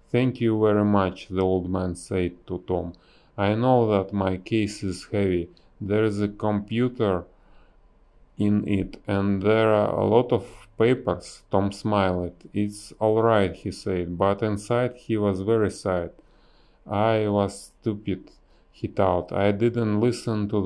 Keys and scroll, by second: 1.6 a, 4.8 b, 4.9 space, 7.7 a, 8.3 Delete, 17.8 b.